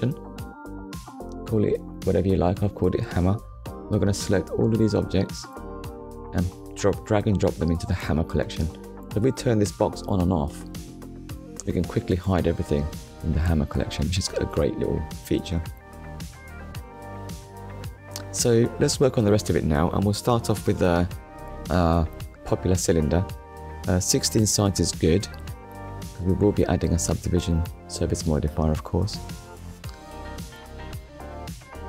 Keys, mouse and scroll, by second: 0.7 shift+h, 1.1 a, 1.3 m, 2.0 r, 2.4 Return, 3.5 click, 4.0 shift+click, 4.9 shift+click, 5.8 click, 8.1 shift+middle click, 9.5 click, 10.8 click, 11.8 click, 12.9 click, 16.4 ctrl+s, 17.5 shift+a, 19.6 click, 21.1 click, 22.2 KP_1, 23.2 Return, 25.8 click, 26.9 click, 28.9 click, 30.2 click.